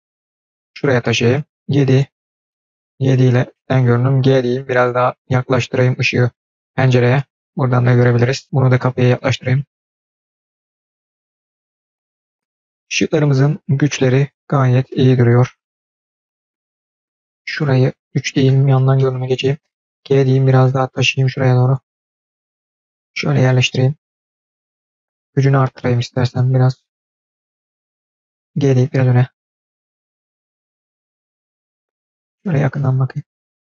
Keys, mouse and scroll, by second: 1.5 KP_7, 2.3-3.1 middle drag, 3.2 KP_7, 3.5-4.0 scroll down 2, 4.0 g, 8.4 click, 9.2 g, 11.3-11.9 middle drag, 11.9 scroll up 2, 12.0 middle click, 15.4-16.2 middle drag, 16.6 KP_7, 18.0 KP_1, 18.0 KP_3, 18.8-19.3 shift+middle drag, 19.8 g, 25.0 click, 26.7 click, 26.8 click, 27.3 click, 30.9 click, 31.1 g, 32.0-32.4 scroll up 4, 32.4-32.8 scroll down 1, 33.3-33.6 scroll down 5.